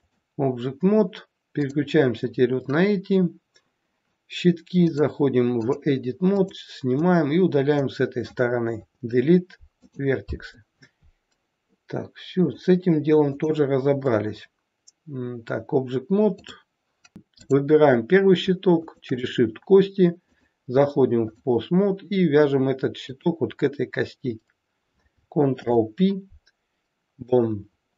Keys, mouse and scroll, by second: 1.6 click, 4.8 click, 6.5 click, 8.8 Delete, 12.5 click, 16.5 click, 17.4 click, 18.8 shift+click, 19.0 shift+click, 20.3 click, 23.0 click, 25.5 ctrl+p.